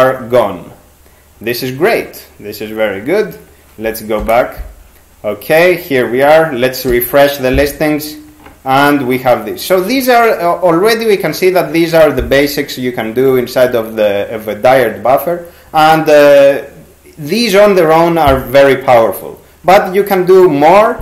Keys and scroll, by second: 4.2 shift+6, 6.9 g.